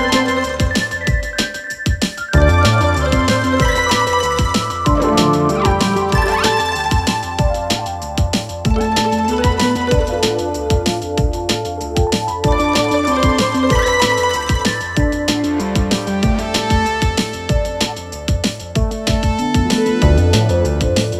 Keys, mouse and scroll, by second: 0.8-1.5 scroll up 2, 1.5-3.8 drag, 3.8 BackSpace, 5.2-8.0 drag, 8.0-8.8 scroll down 3, 8.8 click, 9.4 g, 12.2 click, 13.1-14.9 drag, 14.9-15.2 scroll up 1, 15.4 click, 15.8 scroll down 2, 16.0 scroll up 1, 16.2 scroll down 2, 16.6 click, 17.7 p, 19.6-20.3 drag, 20.3 p.